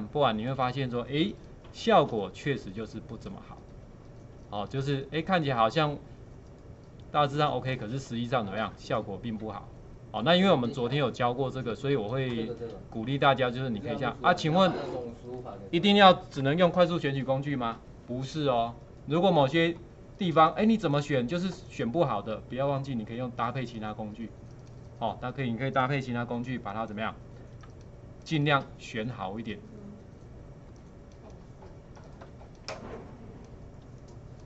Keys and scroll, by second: 1.2 space, 11.8 space, 27.6 alt+space.